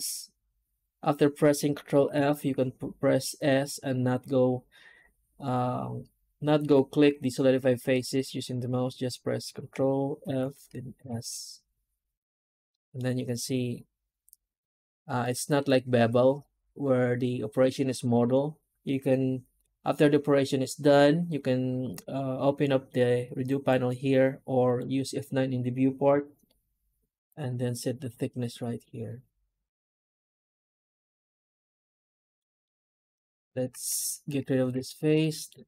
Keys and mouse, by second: 12.6 middle click, 15.1 middle click, 32.5 middle click, 33.0 3, 33.4 right click, 34.3 2, 34.8 alt+shift+right click, 35.1 middle click.